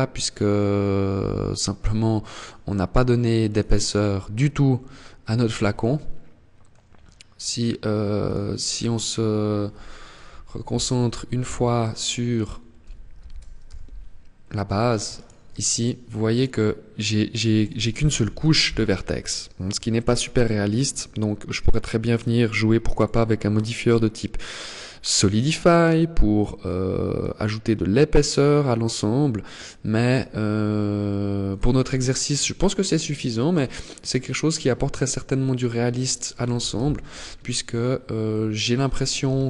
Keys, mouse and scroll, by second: 1.6 click, 4.8 Tab, 5.2 middle click, 7.4 right click, 9.5 ctrl+l, 10.7 h, 11.6 right click, 12.4 ctrl+l, 12.9 h, 14.4 alt+right click, 15.0 alt+right click, 15.5 alt+right click, 17.4 ctrl+l, 17.8-18.4 scroll up 1, 18.4 shift+middle click, 18.4 scroll up 1, 19.1 middle click, 20.8 click, 22.2 click, 26.4 click, 30.7 click, 31.5-32.2 scroll down 2, 32.0 middle click, 32.6 scroll down 4, 33.4 middle click, 35.8 alt+h, 36.4 Tab, 37.6 middle click, 38.5 KP_0.